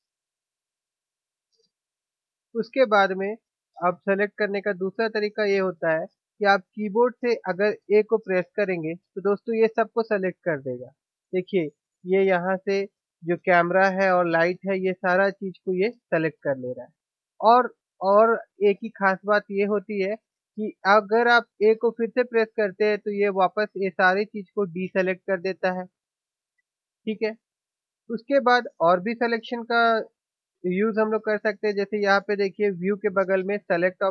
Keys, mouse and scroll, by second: 1.5 a, 9.0 a, 24.8 a.